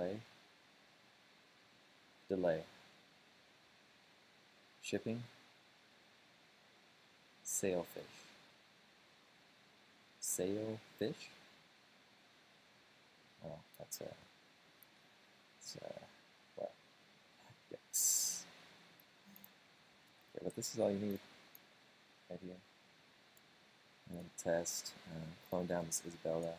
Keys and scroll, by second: 20.1 super+space, 20.2 typing, 26.0 super+space, 26.4 Return.